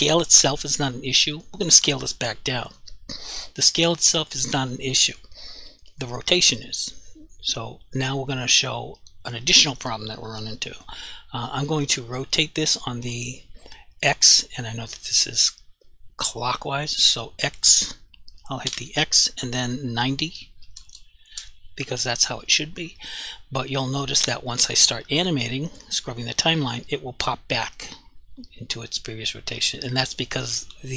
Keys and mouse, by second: 11.8 r, 13.1 right click, 17.1 r, 18.7 x, 20.8 typing, 21.3 Return, 28.5 click.